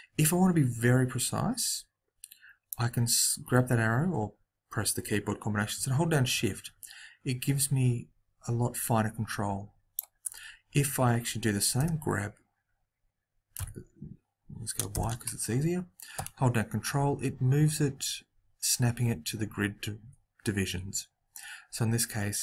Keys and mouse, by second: 2.6 click, 11.7 g.